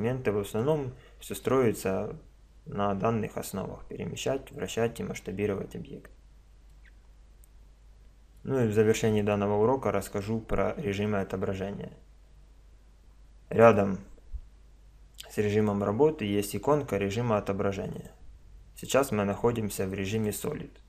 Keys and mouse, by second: 0.6-2.6 middle drag, 6.7-8.6 middle drag, 8.8-12.2 middle drag, 15.0 click, 18.0-19.7 drag.